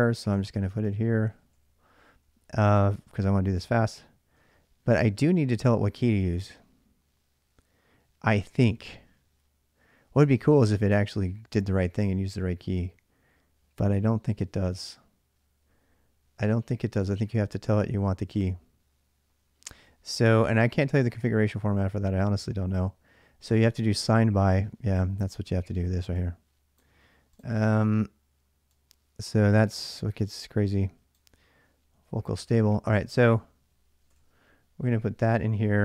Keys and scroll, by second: 0.0-3.0 typing, 0.0 Return, 0.2 ctrl+[, 2.6 ctrl+[, 4.2 l, 4.3 l, 19.5 ctrl+a, 19.7 ctrl+a, 32.2 ctrl+a, 32.9-34.4 typing.